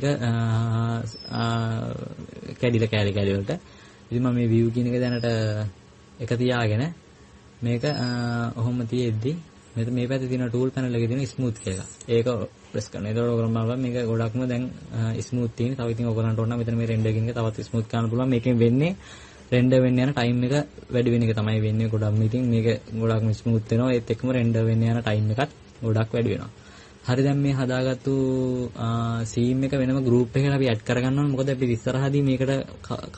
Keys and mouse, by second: 13.3-14.7 drag, 14.2-15.7 middle drag, 21.7-22.6 middle drag, 23.5-30.6 middle drag.